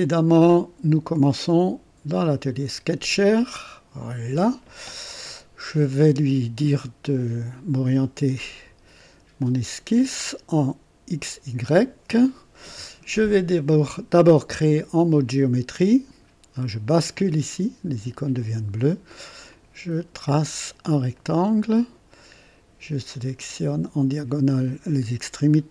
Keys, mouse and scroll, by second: 3.5 click, 9.4 click, 11.6 click, 16.7 click, 18.4 click, 19.5 click, 20.6 click, 21.2 right click, 23.1 click, 24.6 click.